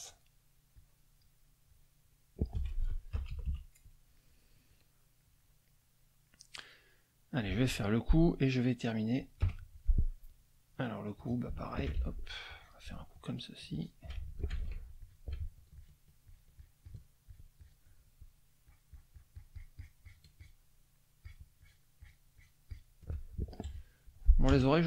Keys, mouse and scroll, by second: 0.8 click, 1.6-2.6 drag, 2.6 F1, 3.2 KP_Subtract, 4.2 click, 4.7 click, 5.2 click, 5.8-7.6 drag, 7.9 click, 8.4 click, 9.4 F6, 9.6 click, 11.1 click, 12.0 ctrl+shift+z, 12.5 ctrl+shift+click, 13.7 shift+click, 14.5 ctrl+shift+z, 15.0 ctrl+shift+click, 15.8 shift+click, 16.2 shift+click, 17.3 shift+click, 18.6-20.3 shift+drag, 20.4 shift+click, 21.2 shift+click, 21.6 shift+click, 23.1 shift+middle click, 23.3 shift+click, 23.7 shift+F1, 24.5 KP_Add.